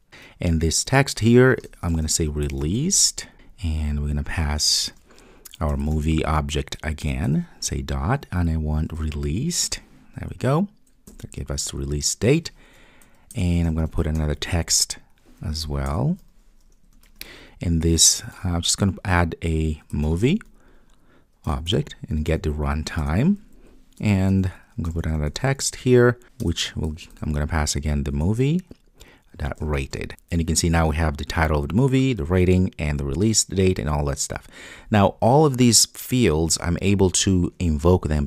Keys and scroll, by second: 0.0 Return, 7.1 Return, 16.0 Return, 21.5 Return, 22.3 Return, 26.5 Return.